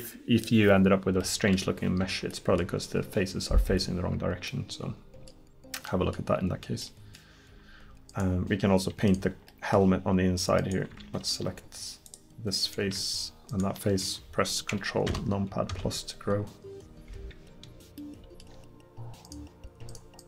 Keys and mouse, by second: 6.4 middle click, 12.1-15.1 drag, 15.1 ctrl+KP_Add, 15.7 ctrl+KP_Add.